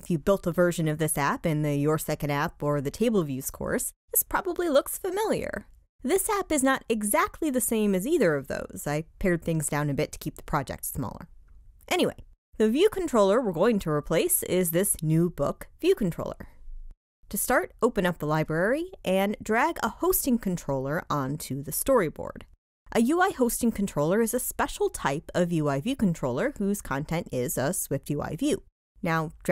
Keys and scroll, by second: 16.3 shift+super+l.